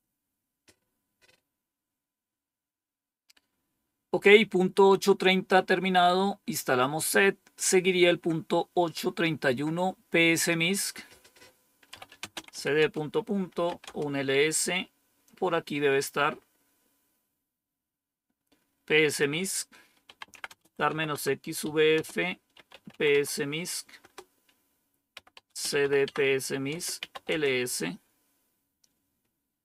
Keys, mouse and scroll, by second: 6.7 click, 10.7 click, 11.6-13.9 typing, 16.3-17.0 scroll up 1, 17.0 scroll up 1, 19.0 click, 19.4 click, 19.7-23.3 typing, 23.9 Return, 24.8-27.7 typing, 29.0 typing.